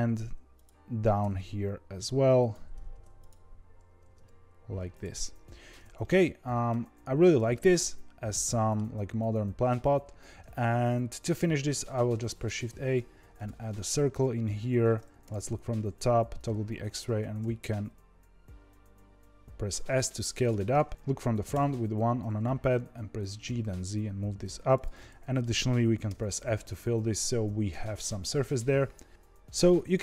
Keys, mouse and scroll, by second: 1.1 g, 2.8 ctrl+r, 3.9 g, 5.5 Tab, 5.9-6.7 middle drag, 6.7 scroll down 1, 6.9 z, 7.4-10.5 middle drag, 11.7 shift+a, 15.2 KP_7, 15.8 z, 17.0 Tab, 17.3 s, 20.9 KP_7, 21.4 KP_1, 23.3 g, 24.9-26.0 middle drag, 26.0 f, 27.3 Tab, 28.0 z, 29.1-30.0 scroll down 1.